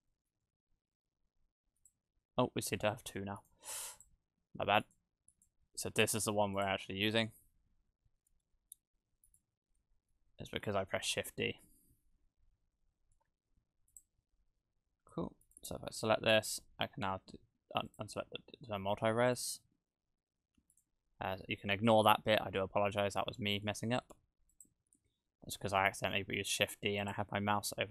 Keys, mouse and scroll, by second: 0.1 middle click, 1.9 click, 3.4 right click, 3.7 x, 4.8 right click, 5.3 right click, 7.1 click, 9.3 right click, 10.1 KP_0, 10.6 shift+`, 15.5 right click, 17.9 click, 19.4 right click, 20.7 right click, 21.4-22.2 scroll down 4, 22.2 scroll down 1, 23.7 `, 25.0 shift+`.